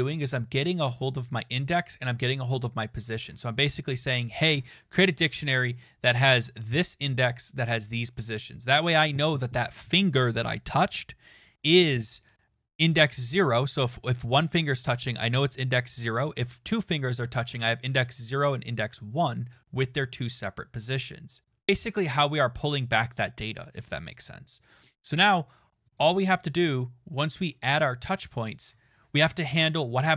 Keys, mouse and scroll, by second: 24.1 click, 25.9 click, 28.3 click, 28.5 click, 29.5 Return, 29.9 BackSpace.